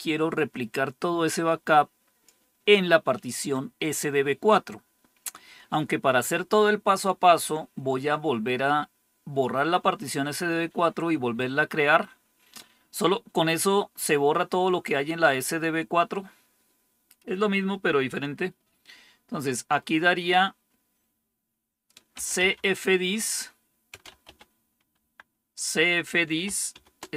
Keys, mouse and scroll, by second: 21.8-24.7 typing, 24.9 Tab, 26.4-27.1 typing.